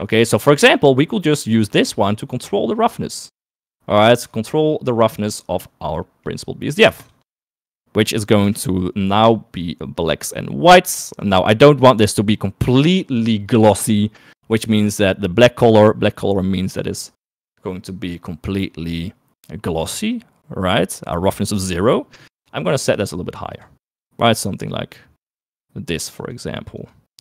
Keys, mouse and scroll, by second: 0.2 click, 1.8 right click, 2.8 click, 4.5 right click, 5.2 right click, 6.3 middle click, 7.6 ctrl+shift+click, 8.9 middle click, 15.6 click, 22.7 click.